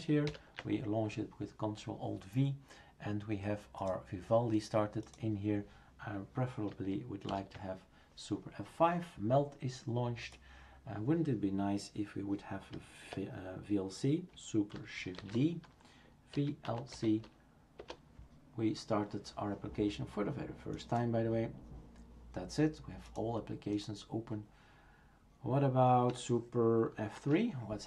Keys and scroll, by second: 0.3 ctrl+alt+v, 7.3 super+F5, 15.2 shift+super+d, 16.1-17.4 typing, 17.8 Return, 27.2 super+F3.